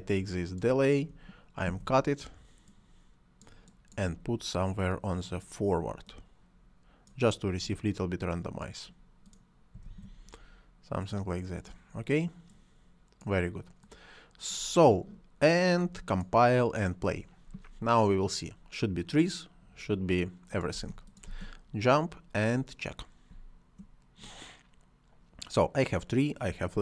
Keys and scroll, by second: 1.6 ctrl+x, 9.8 ctrl+v, 20.6 space, 23.2 space.